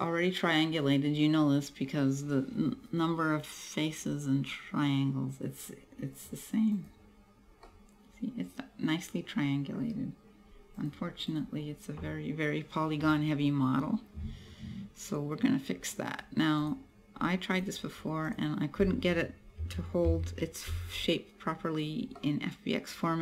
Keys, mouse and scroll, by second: 0.1 click, 7.1 click, 7.8 middle click, 11.1 click, 16.7 click, 17.6 click, 18.3 click, 22.2 middle click.